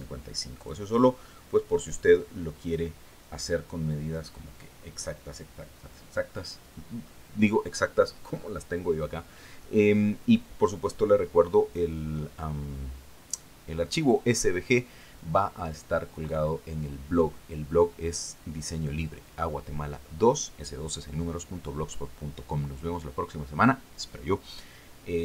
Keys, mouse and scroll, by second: 2.1 click.